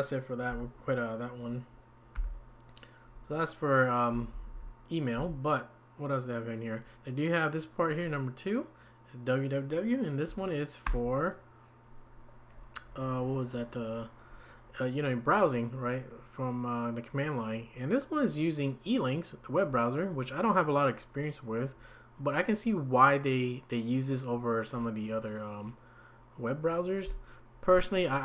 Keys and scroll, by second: 0.5 q, 4.3 Down, 4.5 Down, 5.2 Up, 10.9 Return.